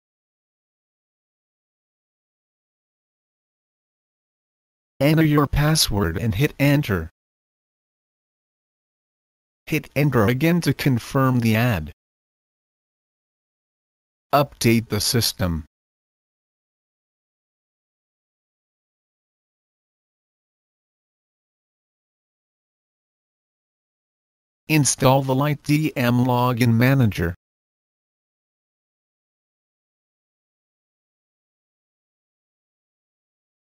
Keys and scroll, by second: 0.0-2.6 typing, 3.9-4.6 typing, 6.2 Return, 10.4 Return, 14.1-17.6 typing, 24.4-32.1 typing.